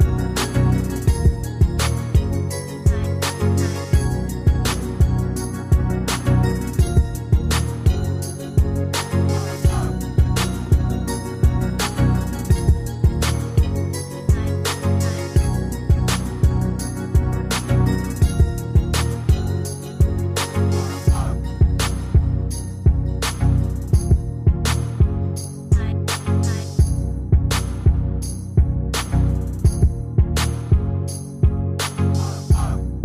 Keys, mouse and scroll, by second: 12.7 ctrl+click, 17.6 ctrl+click, 22.4 ctrl+click, 24.5 shift+click.